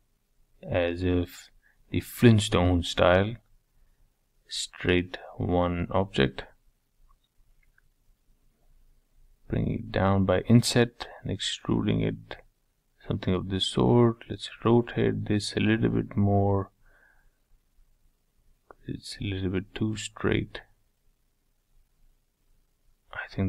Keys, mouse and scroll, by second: 1.6 e, 3.6 i, 5.6 ctrl+z, 5.9 ctrl+z, 9.3 e, 10.7 middle click, 11.2-12.0 scroll down 3, 12.0 Tab, 13.0 g, 14.5 g, 16.2 middle click, 16.9 scroll down 4, 17.2-19.2 middle drag, 19.2 r, 21.9-22.3 scroll down 3, 22.3-23.3 middle drag, 23.3 click.